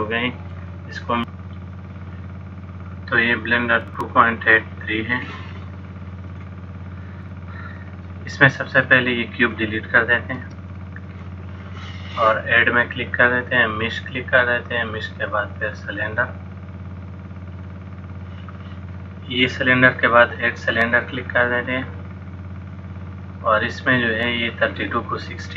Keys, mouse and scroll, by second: 6.4 click, 9.6 click, 10.5 x, 13.1 click, 21.4 click, 24.6 click.